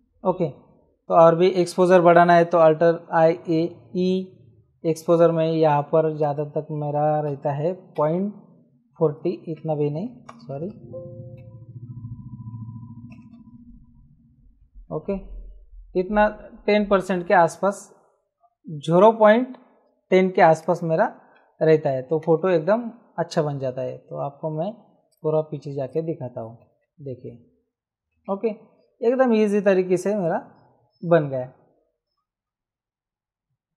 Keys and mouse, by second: 2.9 alt+i, 3.4 alt+a, 3.8 alt+e, 6.1 click, 7.2 KP_1, 7.9 KP_4, 9.1 Escape, 10.3 alt+i, 10.5 alt+a, 10.7 alt+e, 11.3 Escape, 13.1 alt+i, 13.3 alt+a, 13.5 alt+e, 20.5 click, 22.2 ctrl+z, 23.8 F9, 25.1 click, 26.8 ctrl+z.